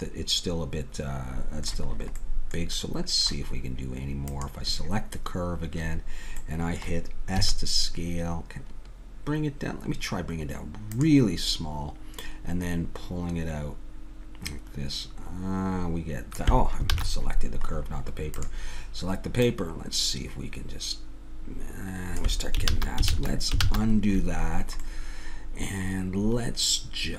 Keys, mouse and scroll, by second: 1.9-3.0 middle drag, 4.3-6.4 drag, 6.4 middle click, 7.4 s, 11.4 middle click, 12.2-14.4 drag, 16.9 ctrl+z, 17.7 middle click, 18.3-22.1 drag, 22.7 ctrl+z, 23.1 ctrl+z, 23.7 ctrl+z, 24.5-25.7 drag, 25.7 middle click, 26.4 middle click.